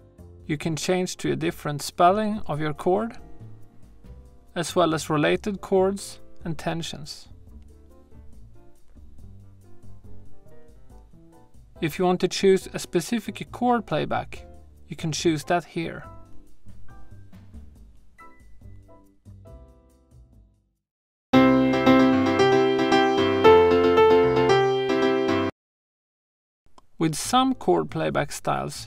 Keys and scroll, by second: 21.1 space, 25.4 space.